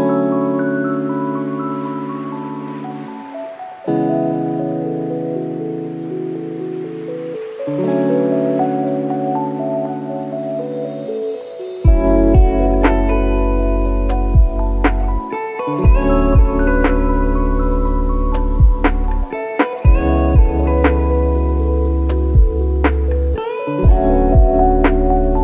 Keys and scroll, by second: 0.6 Left, 0.7 ', 4.6 ctrl+:, 10.9 F1, 12.6 F1, 13.8 F1, 20.3 F1, 22.0 F1, 23.5 F1.